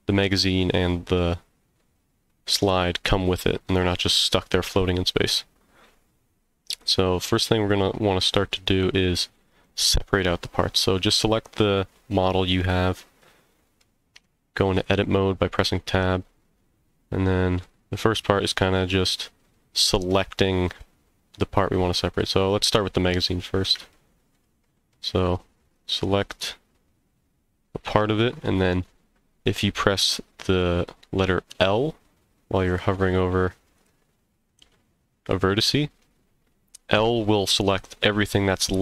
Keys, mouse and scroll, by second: 5.9 scroll up 1, 6.7 click, 7.3-9.6 middle drag, 12.6-13.8 middle drag, 14.2 Tab, 15.6-17.6 middle drag, 20.1 middle click, 22.8 middle click, 23.3 scroll up 1, 23.9 shift+middle click, 24.6 middle click, 25.6 click, 31.5 l, 33.8 click, 34.6 l.